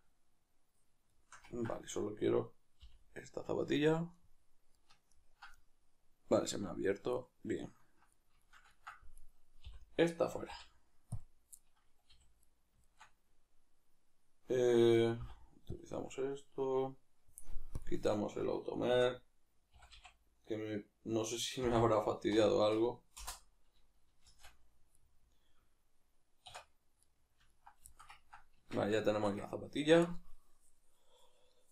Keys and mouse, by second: 2.0 right click, 2.8 l, 3.8-9.2 ctrl+middle drag, 9.2 right click, 11.6-17.7 middle drag, 12.1 a, 15.2 ., 17.7-18.9 drag, 18.9 shift+d, 24.9-31.7 middle drag, 26.4 \, 28.6 Tab.